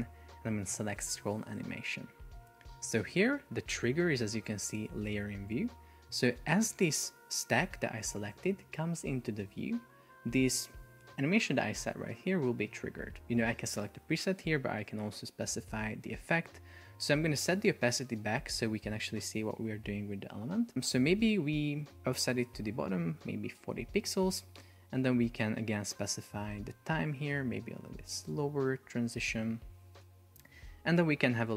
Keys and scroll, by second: 23.9 Return, 26.5 Up, 28.6 Down, 30.4 Up.